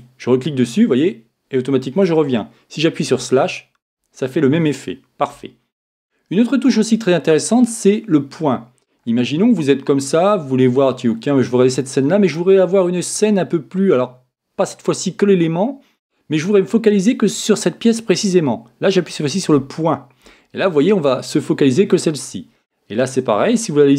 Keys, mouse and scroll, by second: 3.1 KP_Divide, 9.0-19.5 middle drag, 19.5 KP_Decimal.